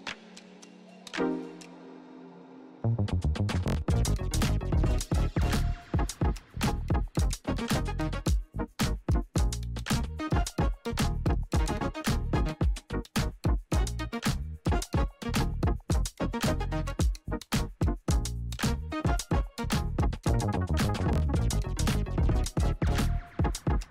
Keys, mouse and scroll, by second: 4.8 Return, 5.8 click, 8.5 Return, 9.5 click, 13.6-14.8 typing, 16.1 shift+u, 16.5 shift+p, 18.6 Return, 18.7-20.5 typing, 22.3 ctrl+a, 23.4 click.